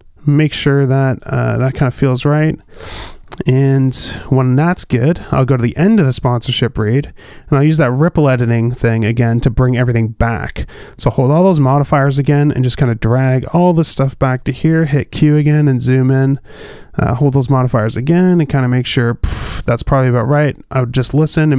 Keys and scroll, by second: 0.7 space, 3.1 space, 16.2 q.